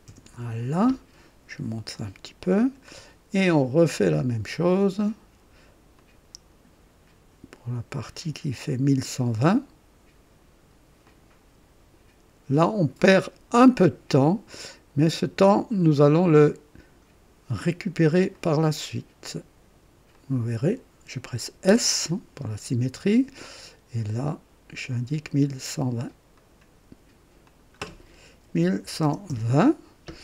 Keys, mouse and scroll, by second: 1.9-3.0 drag, 4.1 click, 5.9 click, 8.6 click, 11.0 click, 12.9 click, 13.3 typing, 13.7 right click, 14.3 right click, 16.1 click, 18.3 click, 20.1 click, 21.6 typing, 24.8 click, 26.3 click, 27.4 click, 28.4-29.0 typing, 29.3 Return.